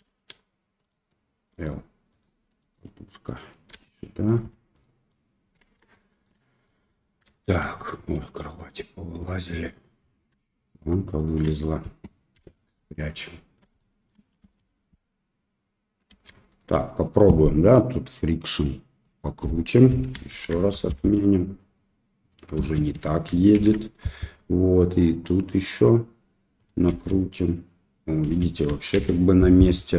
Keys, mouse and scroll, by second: 0.0 g, 1.5 click, 2.1 click, 2.6 click, 3.7 g, 4.7 middle click, 5.9 shift+middle click, 6.6 middle click, 7.3 shift+middle click, 8.1-9.2 drag, 9.5 middle drag, 11.1 shift+click, 12.3 h, 12.7 middle click, 13.7-14.0 shift+middle drag, 14.4 space, 16.1 space, 18.6 click, 19.5 middle click, 20.3 shift+Left, 20.7 space, 22.6 space, 23.5 shift+Left, 25.9 click, 26.8 space, 28.3 space, 28.9 shift+Left.